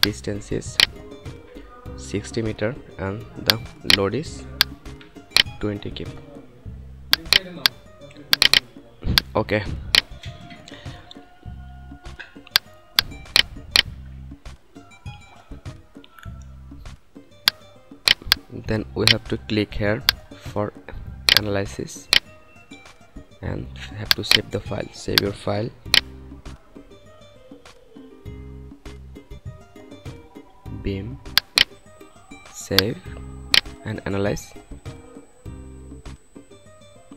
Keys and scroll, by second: 1.1 6, 1.9 0, 5.2 2, 14.5 F9, 26.3 s, 27.4-29.2 typing.